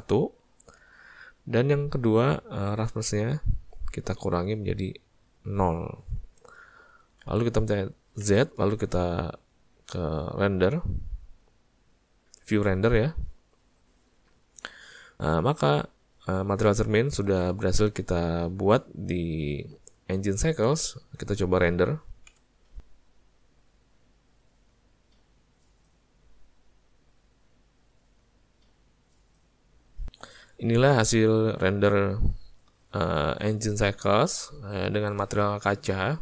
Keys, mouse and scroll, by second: 3.2 click, 18.6 alt+a.